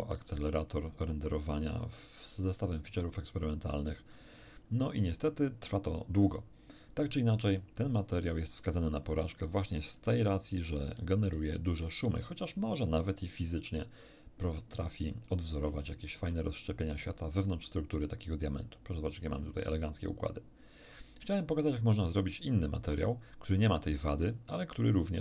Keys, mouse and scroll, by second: 2.9 scroll down 1, 4.8-5.4 scroll down 1, 9.1 right click, 11.7 shift+F3, 14.7 middle click, 15.8 shift+middle click.